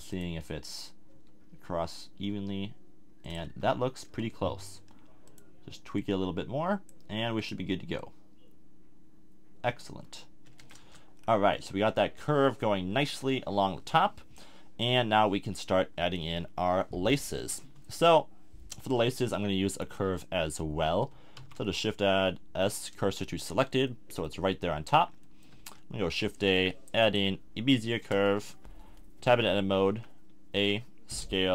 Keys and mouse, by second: 0.1 middle click, 1.1 s, 3.4 z, 9.8 click, 10.6 a, 10.8 Tab, 11.7 middle click, 11.8 middle click, 12.9 KP_1, 17.1-17.4 middle drag, 18.0 KP_7, 19.1-19.9 middle drag, 21.3 shift+s, 25.6 shift+a, 28.4 Tab, 29.9 a, 30.5 s.